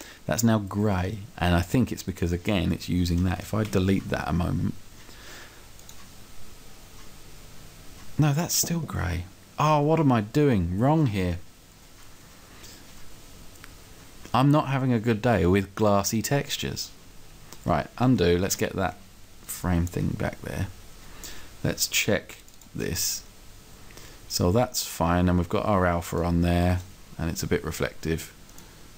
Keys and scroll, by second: 3.7 Delete.